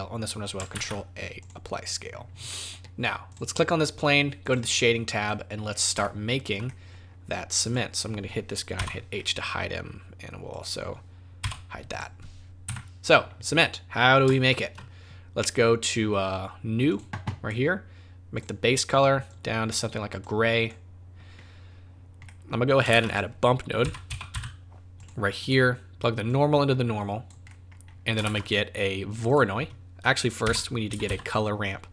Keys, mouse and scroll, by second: 0.7 ctrl+a, 2.5 middle click, 3.3 click.